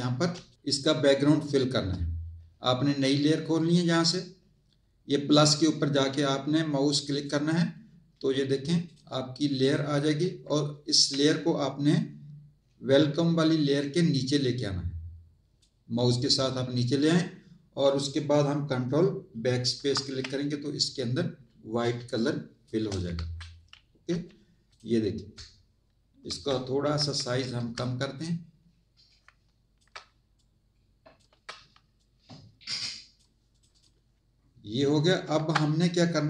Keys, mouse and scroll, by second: 0.3 space, 0.5 click, 1.2 click, 7.1 click, 8.8 click, 9.6 click, 13.7 click, 19.7 ctrl+BackSpace, 21.9 space, 22.1 click, 23.1 Tab, 24.7 click, 26.8 ctrl+t, 28.1 alt+shift+click, 30.3 shift+click, 31.9 click, 35.3 z.